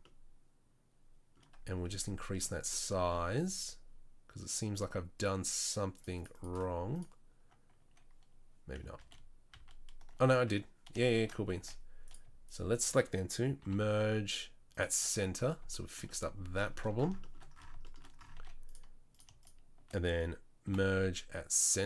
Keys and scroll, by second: 8.9 ctrl+z, 9.5 ctrl+z, 11.5 1, 13.6 m, 18.3 z, 20.6 m.